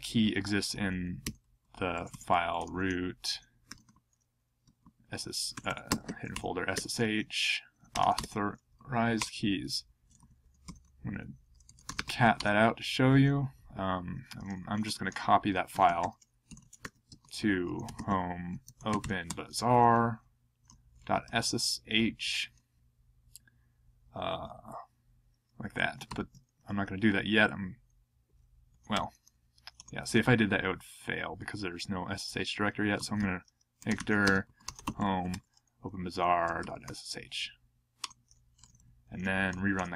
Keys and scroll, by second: 1.0-8.6 typing, 9.1 Return, 10.2 ctrl+p, 10.4 ctrl+a, 10.6 ctrl+d, 11.4-12.5 typing, 14.8 ctrl+p, 15.5 ctrl+a, 15.7 ctrl+d, 16.2-18.4 typing, 20.4-21.7 typing, 24.3 /, 26.0 ctrl+a, 26.0 ctrl+k, 28.9 ctrl+y, 29.8 Return, 32.7-37.3 typing, 38.0 Return, 38.7 ctrl+p, 39.7 ctrl+p, 39.8 Return.